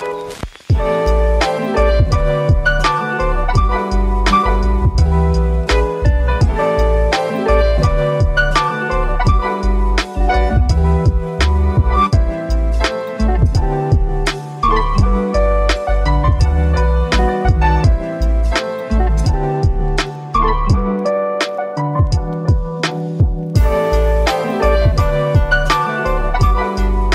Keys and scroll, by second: 0.3-2.1 typing, 9.5 1, 9.8 Return, 23.5-24.5 typing, 25.9-26.6 typing.